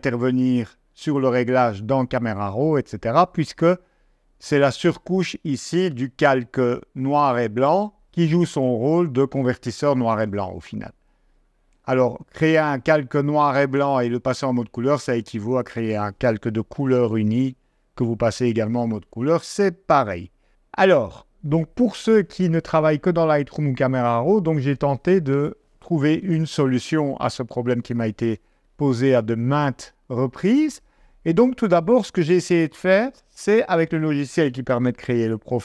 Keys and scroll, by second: 18.9 super+Tab.